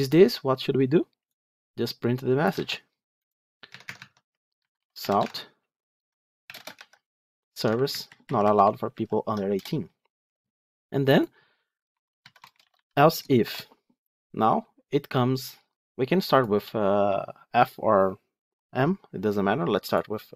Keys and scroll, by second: 2.4 ctrl+c, 3.6 Tab, 6.6 ctrl+v.